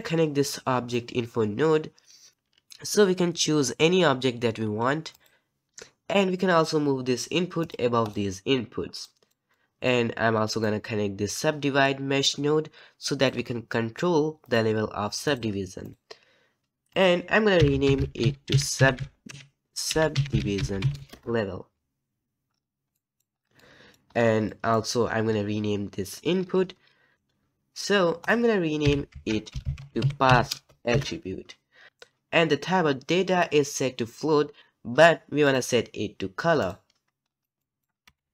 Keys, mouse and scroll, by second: 2.3 click, 7.7-21.1 drag, 27.1 click, 30.9-38.3 drag.